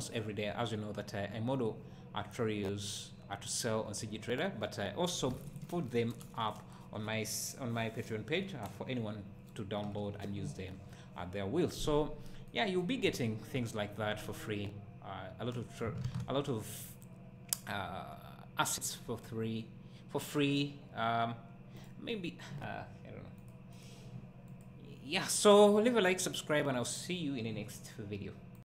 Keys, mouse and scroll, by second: 12.6-13.1 right drag, 13.1 `.